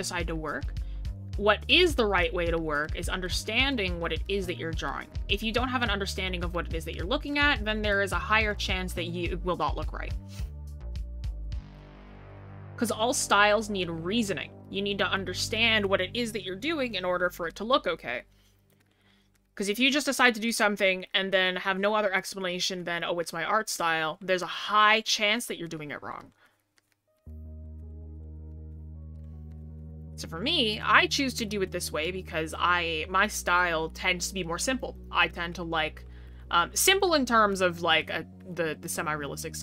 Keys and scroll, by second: 16.0 scroll down 1, 16.7 scroll up 1.